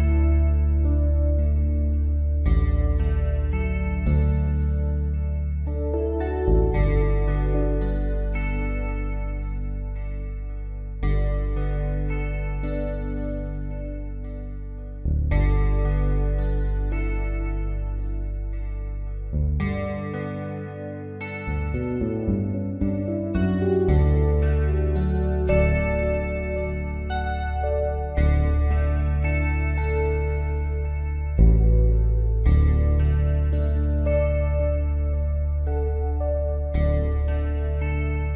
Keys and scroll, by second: 8.3 space, 11.8 space, 18.0-19.0 typing, 28.8 space, 37.8 space.